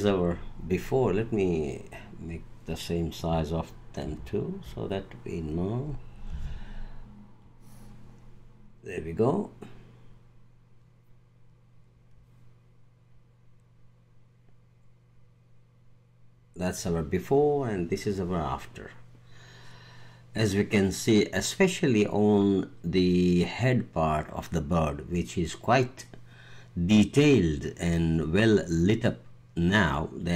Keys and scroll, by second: 4.0 super+-, 6.3 Tab.